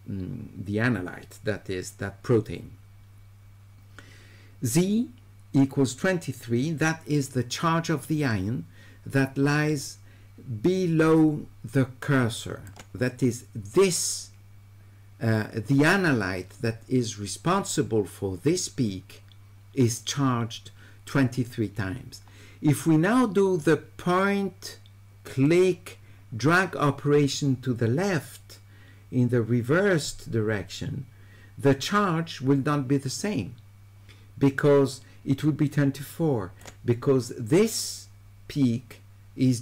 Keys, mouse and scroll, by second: 25.5-36.6 drag.